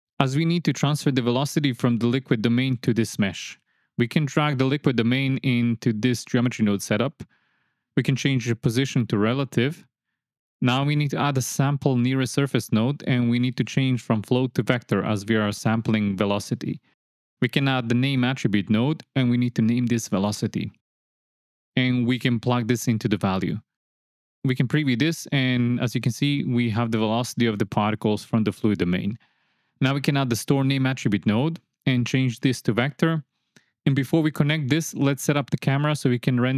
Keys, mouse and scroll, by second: 1.6 click, 5.3 click, 7.1 shift+click, 8.3 click, 8.7 click, 9.9 click, 12.8 click, 14.4-15.6 drag, 16.1 click, 17.0 shift+a, 20.1 click, 21.1 click, 21.5-22.5 drag, 23.2 click, 23.6-24.1 drag, 25.1 ctrl+shift+click, 26.4-27.8 drag, 28.4 space, 29.6 x, 29.6 shift+a, 32.3 click, 33.4-34.6 drag.